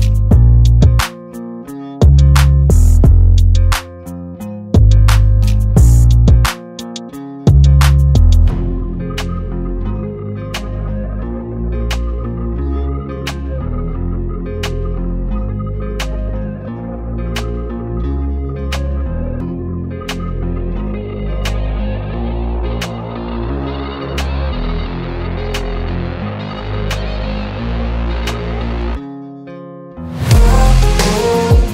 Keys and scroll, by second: 1.6 space, 3.3 r, 6.7 space, 7.0 e, 7.5 space, 8.0 p, 9.1 Return, 10.3 Return, 14.9 space, 15.3 p, 16.7 Return, 20.1 space, 23.2 r, 24.1 Escape, 25.6 space, 25.9 p, 27.1 Return, 28.2 Return.